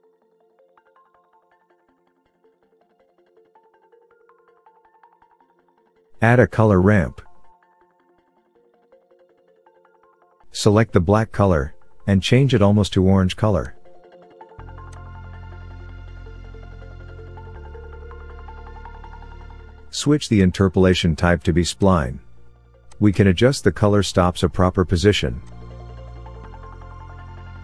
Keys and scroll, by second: 7.3 shift+a.